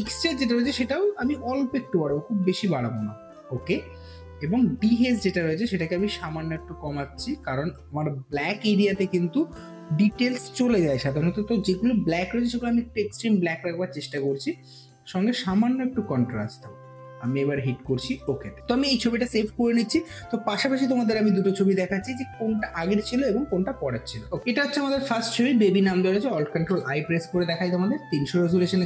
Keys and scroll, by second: 26.4 ctrl+alt+i.